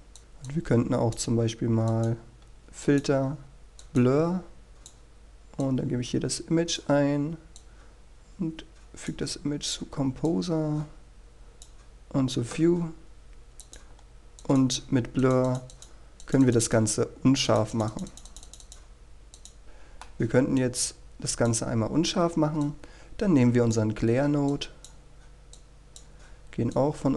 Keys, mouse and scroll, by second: 7.2-13.1 drag, 14.0-14.8 scroll up 1, 14.8 click, 19.6 scroll down 1, 20.2-21.6 middle drag, 21.7-27.1 drag.